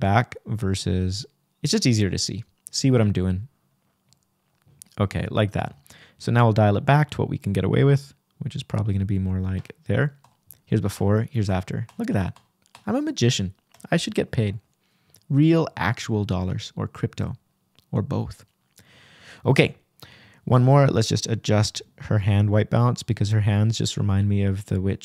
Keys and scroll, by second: 2.7 \, 6.2 Return, 13.0 k.